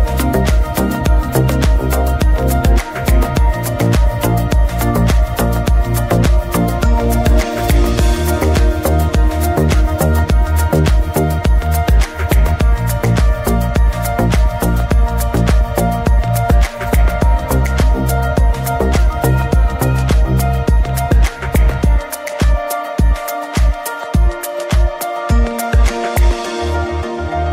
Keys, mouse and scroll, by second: 1.5 middle click, 2.1-4.3 drag, 4.3-5.8 middle drag, 5.8 ctrl+shift+click, 7.0-8.2 scroll up 2, 8.2-12.1 scroll down 2, 12.1-13.4 scroll down 1, 13.4 click, 13.4 Return, 14.9 click, 15.0 KP_Enter, 15.5-16.5 scroll down 2, 16.5-16.9 middle drag, 16.9-18.1 scroll up 2, 18.1-21.8 scroll up 1, 21.8 click, 21.9 KP_Enter, 24.0-25.2 drag, 25.2 KP_Enter, 26.2 click.